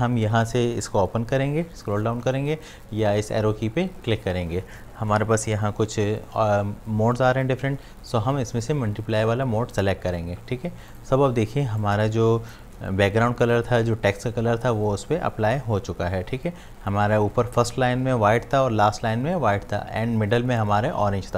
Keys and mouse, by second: 9.7-15.4 drag.